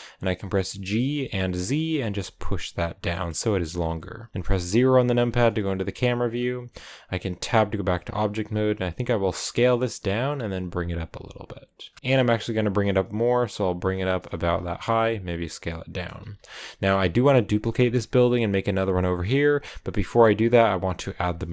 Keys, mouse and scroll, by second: 0.6 g, 3.0-4.3 middle drag, 4.3 KP_0, 5.1-6.1 scroll down 4, 6.3 scroll up 2, 7.3 Tab, 8.1 s, 9.2 g, 11.9 g, 14.2 s, 14.7 g, 16.2 s, 17.5 s, 17.7 g, 19.2 g, 19.7 scroll down 1, 19.8 middle click, 20.3-20.8 scroll down 2, 21.3-21.5 shift+middle drag.